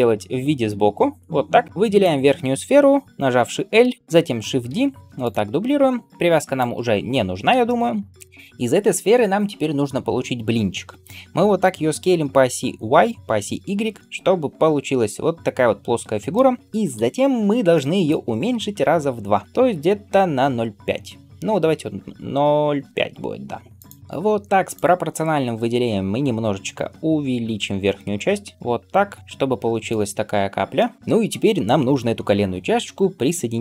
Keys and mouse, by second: 1.9 click, 3.7 l, 4.6 shift+d, 6.5 click, 6.5-24.0 right drag, 11.5 s, 16.8 KP_1, 18.8 s, 24.0 middle click, 24.5 click, 24.6-33.6 middle drag, 26.3 s, 30.1 alt+z, 31.0 KP_1.